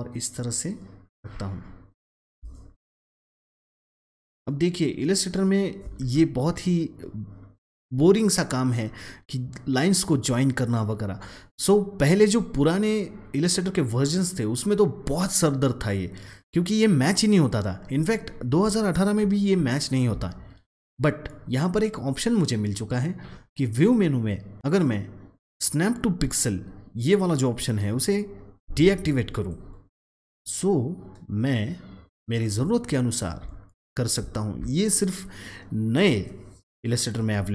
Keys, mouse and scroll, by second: 0.5 click, 1.3-2.1 alt+scroll up 1, 2.1 alt+scroll up 1, 3.5-5.9 drag, 5.9 ctrl+z, 7.7-16.5 drag, 17.9 alt+Num_Lock, 17.9 click, 18.1-19.3 alt+scroll down 1, 19.5 scroll, 19.7-20.1 alt+scroll up 1, 23.7 click, 29.3-33.0 drag, 33.0 click, 33.5-34.1 alt+scroll down 1, 34.1 alt+scroll down 1.